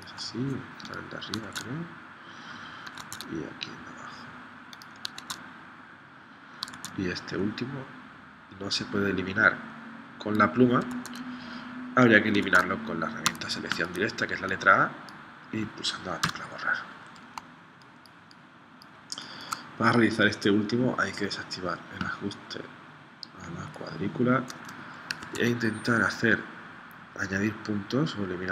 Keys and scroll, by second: 1.5 super+Tab, 3.0 super+Tab, 5.2 super+Tab, 6.7 super+Tab, 10.9 super+Tab, 12.4 super+Right, 13.3 a, 16.3 BackSpace, 17.5 space, 25.2 super+Tab.